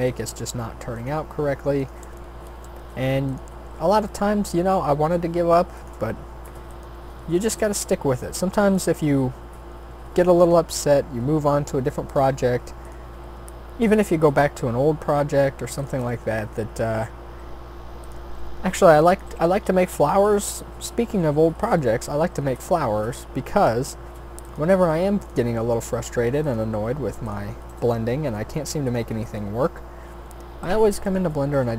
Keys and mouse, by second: 1.0-2.5 drag, 2.5 shift+d, 3.5 r, 6.1 e, 6.9 s, 7.8 e, 9.9 s, 10.7 e, 12.3 r, 13.2 s, 14.7 e, 17.2 r, 18.4 s, 19.2 g, 20.6 e, 22.7 s, 24.6 e, 25.6 s, 26.7 g, 27.7 g, 31.5 g.